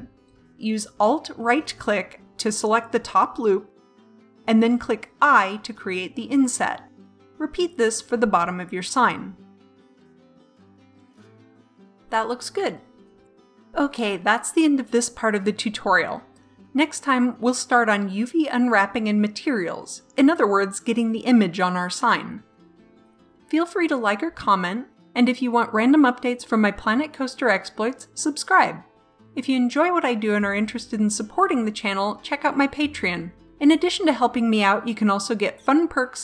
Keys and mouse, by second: 1.5 middle click, 2.8 middle click, 4.0 i, 6.8 middle click, 8.9 i, 10.4 middle click, 11.4 Tab, 12.6 middle click, 13.7-16.5 middle drag, 17.3 middle click.